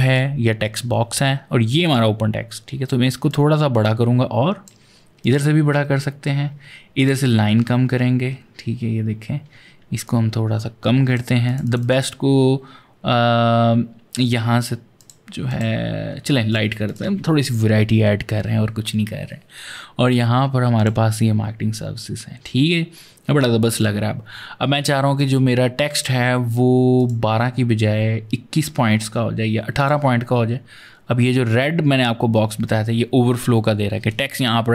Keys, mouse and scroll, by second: 1.7 click, 3.1 shift+click, 5.4-6.8 scroll up 10, 6.8 click, 7.1-8.1 scroll down 12, 8.4-9.9 scroll down 8, 9.9 click, 11.3 click, 11.5 double click, 11.6 click, 13.9 click, 14.8 click, 15.3 click, 16.3 click, 16.7 click, 20.6 click, 25.0 click, 26.8 click, 29.6 click.